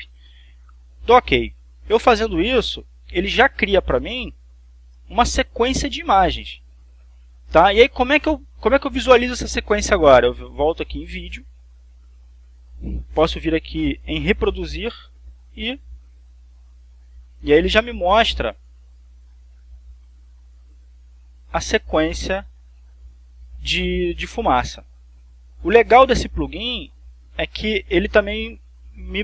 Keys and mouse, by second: 1.6 click, 4.6 click, 5.3 click, 11.6 click, 14.9 click, 16.3 click, 26.2 click, 27.4-28.4 drag.